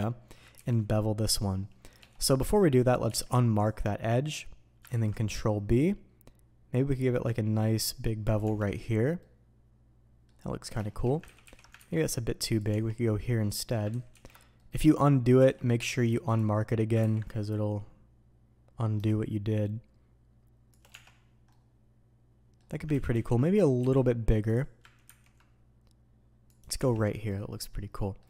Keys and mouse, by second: 24.5-28.2 drag.